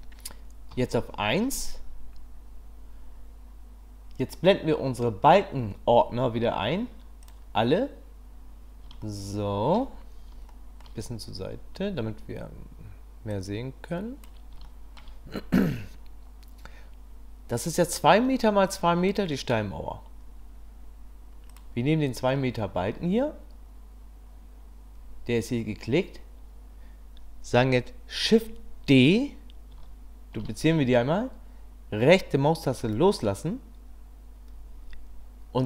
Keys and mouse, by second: 0.7 KP_1, 9.0-9.8 shift+drag, 10.5 shift+click, 13.3 click, 14.6-15.0 shift+middle drag, 21.5 click, 30.4 shift+d.